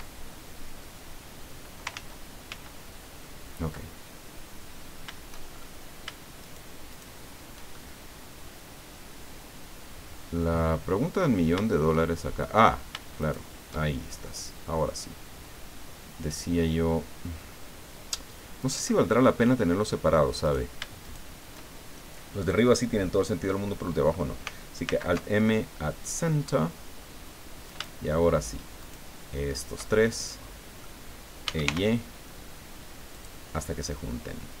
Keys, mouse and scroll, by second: 1.9 ctrl+z, 5.6 shift+scroll up 3, 6.4 shift+right click, 6.9 shift+right click, 7.7-12.6 shift+drag, 13.2 shift+right click, 13.9 shift+scroll down 1, 14.2-19.9 drag, 20.4 right click, 21.0 shift+right click, 24.8 alt+m, 26.0 click, 27.7 shift+right click, 28.8 shift+right click, 29.5 shift+right click, 29.9-31.0 shift+middle drag, 31.2-32.1 typing, 33.1 click, 33.5-34.6 drag.